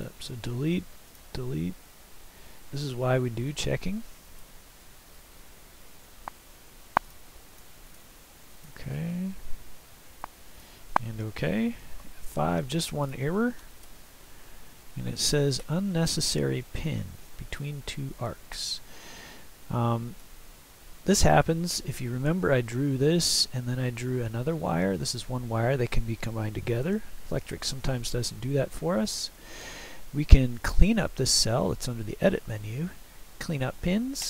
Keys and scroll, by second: 0.0 Delete, 11.7 F5, 13.9 Left.